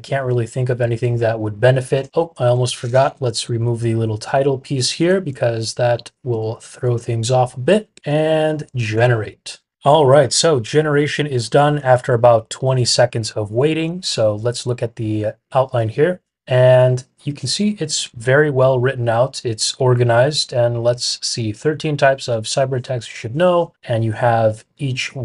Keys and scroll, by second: 3.1 shift+fn+Page_Down, 4.2 BackSpace, 4.9 Page_Down, 5.2 BackSpace, 6.2 Tab, 7.9 Tab, 8.8 Return.